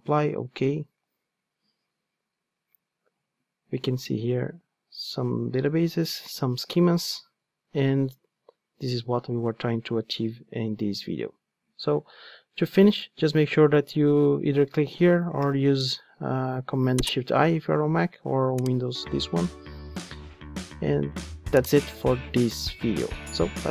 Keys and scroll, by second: 15.3 shift+super+i.